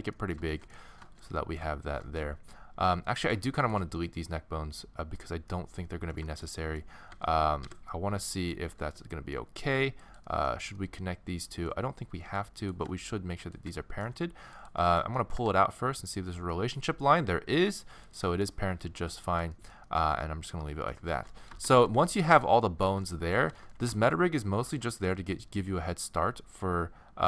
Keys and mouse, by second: 2.2 middle click, 3.2 middle click, 4.0 middle click, 4.2-6.2 middle drag, 6.3 middle click, 6.8 middle click, 7.2 x, 8.0 middle click, 8.7 a, 9.1 a, 11.5 middle click, 12.2 a, 12.3 a, 13.8 middle click, 14.9 middle click, 15.4 g, 18.3 middle click, 19.3-20.5 middle drag, 20.6 middle click, 21.2 middle click, 21.8 a, 22.0 a, 26.9-27.2 middle drag.